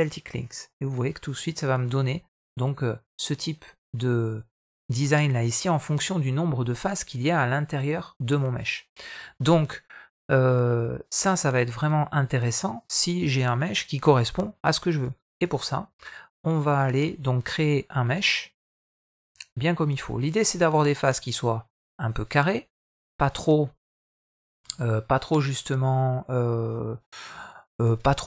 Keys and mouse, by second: 0.6-1.2 middle drag, 16.7 shift+click, 17.6 shift+click, 18.8 x, 22.6 click, 23.9 middle click, 24.6 middle click.